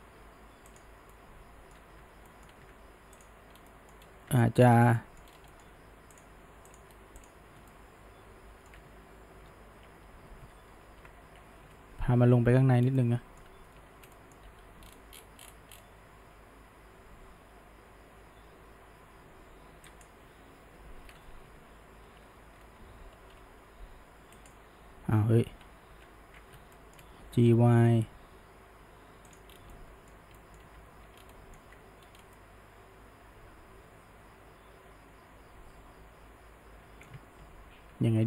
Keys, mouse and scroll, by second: 0.7 click, 1.1-2.0 middle drag, 2.0 Tab, 2.3-2.6 middle drag, 2.6 Tab, 3.2 click, 3.6 scroll down 1, 3.7 middle click, 4.0 scroll up 1, 4.3 Tab, 4.8-5.3 shift+middle drag, 5.3 scroll up 1, 5.5-6.2 middle drag, 6.2 click, 6.7 drag, 7.2 alt+shift+click, 7.7-9.4 middle drag, 9.4 ctrl+KP_Add, 12.2 KP_Decimal, 12.8 scroll down 1, 13.0-14.5 middle drag, 14.5 g, 20.5 KP_1, 23.1 h, 23.3 y, 24.4-25.5 right drag, 25.5 ctrl+z, 25.9 ctrl+z, 26.8 shift+middle click, 27.3 g, 29.7-30.9 middle drag, 30.9 alt+a, 31.2 scroll down 1, 31.3-31.7 middle drag, 31.7 Tab, 32.2 scroll down 1, 32.4-35.4 middle drag, 37.5 ctrl+z, 37.9 ctrl+z.